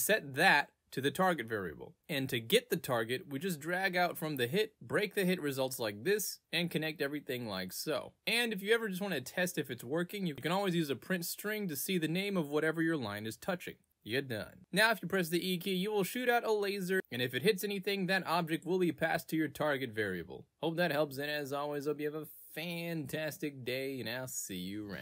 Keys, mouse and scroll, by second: 3.5 click, 5.5 click, 6.7 click, 8.7-9.7 drag, 11.3 click, 11.4 e, 14.9-18.9 right drag, 16.0 w, 19.8 w, 20.9-24.0 typing.